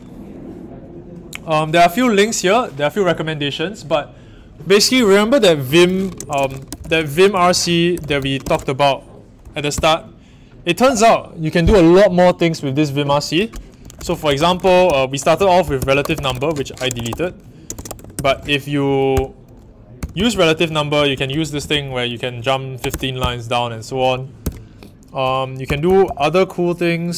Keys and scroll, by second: 6.1-10.8 typing, 13.5-24.4 typing, 25.6-26.0 typing.